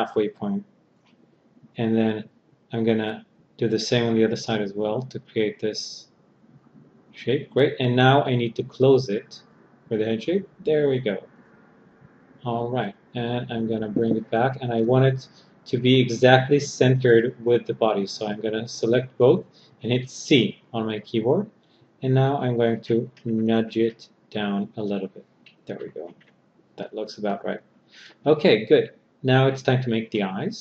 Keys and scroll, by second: 19.6 c.